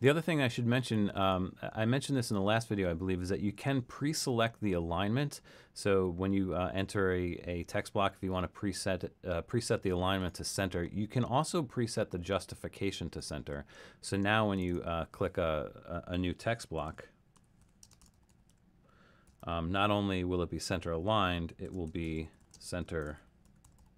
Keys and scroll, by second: 16.5-19.8 typing, 21.4-23.9 typing.